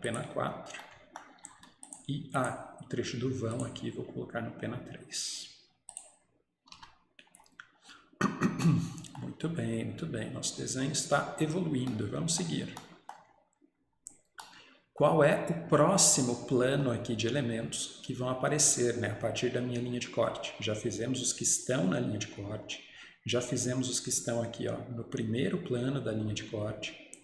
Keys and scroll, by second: 1.5 Escape, 6.6 Escape, 6.8 Escape.